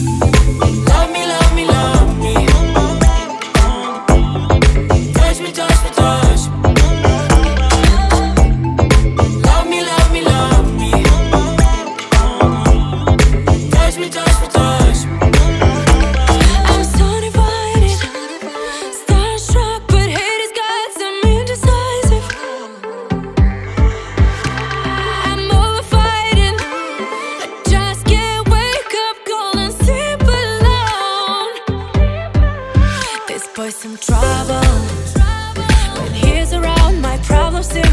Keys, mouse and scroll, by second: 1.4-2.0 scroll down 4, 2.0 middle click, 2.4-3.3 scroll up 2, 3.3 click, 5.2 click, 6.3-7.5 drag, 8.8 click, 9.4 click, 12.0-13.1 middle drag, 13.1 click, 14.5 drag, 15.9 drag, 17.5 click, 18.2-19.6 middle drag, 19.6-22.1 drag, 22.8 click, 23.2-23.9 drag, 23.9 middle click, 24.8 click, 25.4-26.4 drag, 26.8-32.8 drag, 33.5 click, 33.8-34.8 drag, 34.8 shift+d, 35.8-36.9 middle drag, 36.9 click.